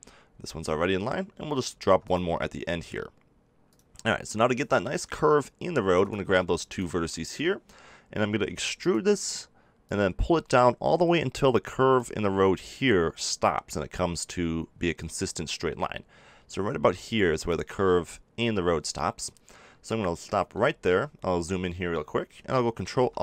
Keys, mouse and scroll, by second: 1.7 ctrl+r, 3.7-4.8 drag, 8.4 e, 8.9-11.7 drag, 20.0-22.8 middle drag, 22.8 ctrl+r.